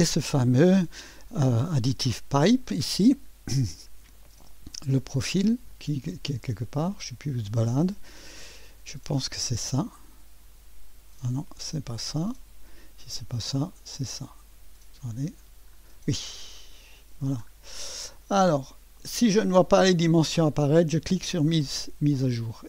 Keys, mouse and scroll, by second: 3.7 click, 4.3 space, 6.1 middle click, 6.4 middle click, 6.6 click, 9.8 click, 11.7 click, 13.5 click, 14.5 click, 14.9-15.7 scroll down 1, 15.7-17.5 scroll up 1, 16.1 click, 17.0 right click, 18.2-19.4 right drag, 21.2-22.6 drag.